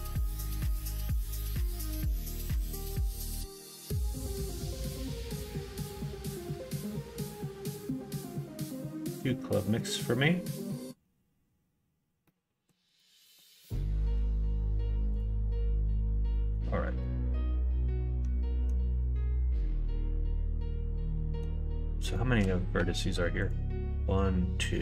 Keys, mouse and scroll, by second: 13.3 middle click, 14.1 x, 15.5 middle click, 16.3 middle click, 17.0-18.7 middle drag, 19.0-21.4 middle drag, 22.1 shift+middle click, 22.7 1, 23.4 click.